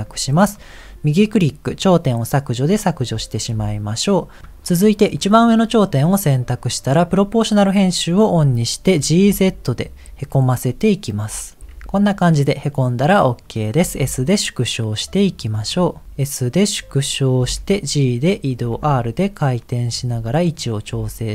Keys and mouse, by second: 3.6 KP_1, 5.2 click, 6.9 click, 9.1 g, 11.6 Tab, 13.9 s, 16.1 s, 17.6 g, 18.8 r, 20.0 g, 20.9 s.